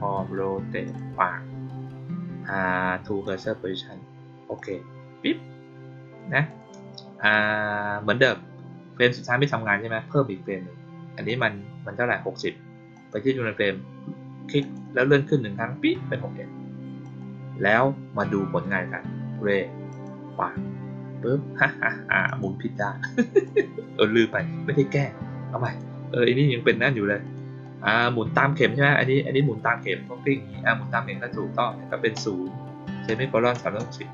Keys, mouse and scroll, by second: 0.8 click, 3.2 click, 4.5 click, 6.4 click, 11.2 click, 12.9 click, 14.5 click, 14.9 middle click, 17.0 click, 19.8 click, 22.2 click, 23.4 click, 25.5 click, 27.2 click, 27.6 click.